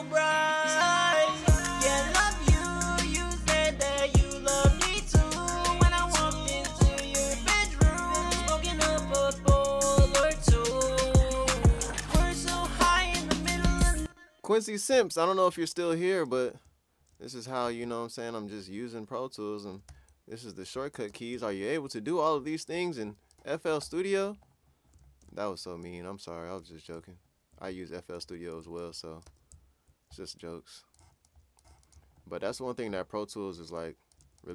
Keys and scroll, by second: 1.3-2.1 typing, 5.7-6.5 typing, 9.0 super+t, 11.8-12.6 typing, 15.5-16.8 typing, 19.8-21.6 typing, 23.1-23.8 typing, 29.0-29.7 typing, 31.4-32.2 typing.